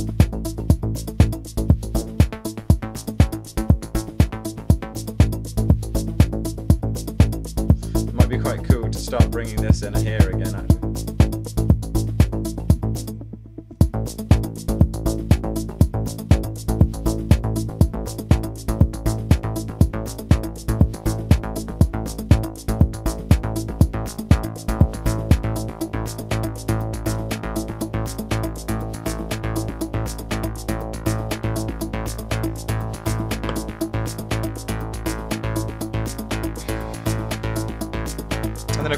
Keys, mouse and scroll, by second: 2.8 super+z, 12.9-13.7 typing, 31.9 alt+click, 32.8 alt+click, 33.8 alt+click.